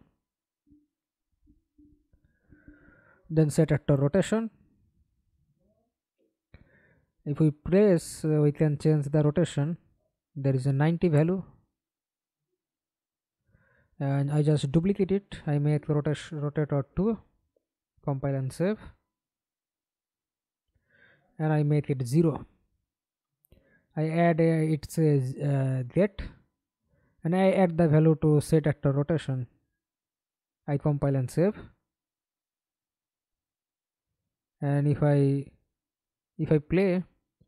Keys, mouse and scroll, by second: 0.5-3.2 typing, 3.4 Return, 13.5 ctrl+d, 14.4 Right, 14.7 BackSpace, 15.7 2, 16.0 Return, 18.2 double click, 20.3 Return, 20.3 0, 22.6 double click, 32.5 alt+click, 36.1 F11, 36.7 alt+p.